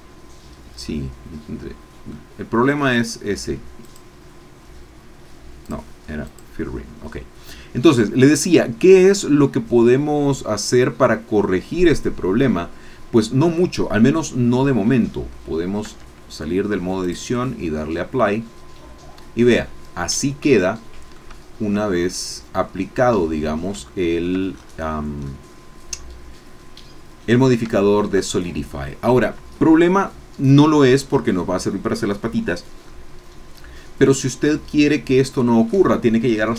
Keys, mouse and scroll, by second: 0.9-2.3 middle drag, 3.9 click, 5.6 click, 6.2 click, 10.1-13.3 middle drag, 16.0 Tab, 17.0 click, 18.0 scroll down 2, 18.2-21.3 middle drag, 21.8 shift+scroll down 1, 22.1-24.4 shift+middle drag, 24.5 shift+scroll up 1, 24.9 scroll down 1, 25.3-27.5 middle drag, 27.8 shift+middle click, 28.3 shift+middle click, 32.5 scroll down 2, 32.8-35.8 middle drag.